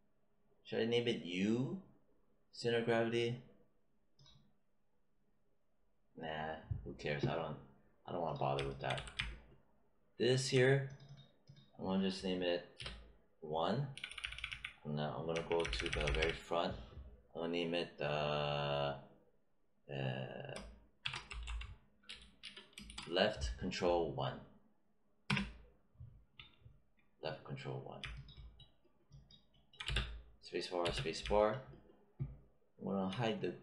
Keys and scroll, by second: 8.9 w, 12.7 BackSpace, 13.9 Down, 15.2 Left, 20.7-22.8 typing, 25.2 Return, 29.8 space.